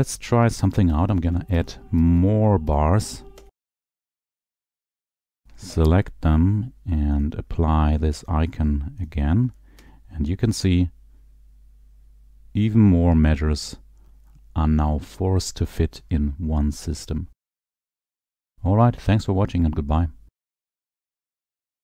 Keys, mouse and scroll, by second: 0.0 click, 1.0-2.6 typing, 3.4-4.5 Escape, 4.3 click, 5.4 shift+click, 7.4 click, 9.2 click, 9.9 Escape, 10.7 click.